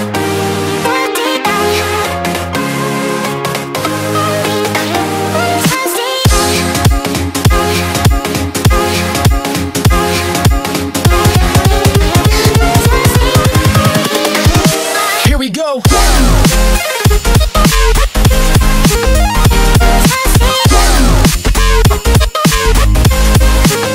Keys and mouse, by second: 5.0 Delete, 5.4 ctrl+d, 6.4 click, 7.8 ctrl+t, 8.6-20.8 drag, 14.1 typing, 20.8 Return, 21.5 click, 22.0 ctrl+t, 23.2-23.9 drag.